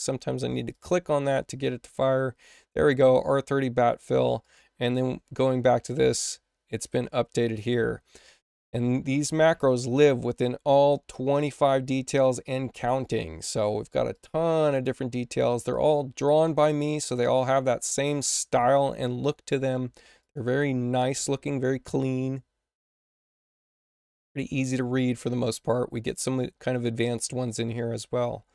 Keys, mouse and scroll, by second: 0.6 click, 4.3 click, 6.6 click, 10.6 click, 11.3 click, 12.9 click, 14.0 click, 14.6 click, 15.6 click, 16.2 click, 16.4 click, 20.1 click, 20.3 click, 22.8 click, 23.0 click.